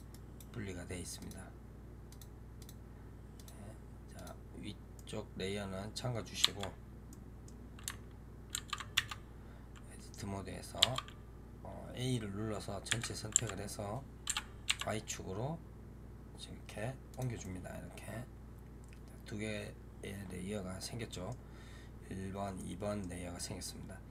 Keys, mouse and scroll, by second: 0.0-1.1 right drag, 1.1 click, 1.9 click, 2.4 click, 3.2 click, 4.0 click, 4.8-6.3 middle drag, 6.3 a, 7.0-8.4 middle drag, 8.4 ctrl+a, 8.8 Tab, 10.7 a, 12.0 scroll down 2, 12.8 g, 17.3-24.1 middle drag.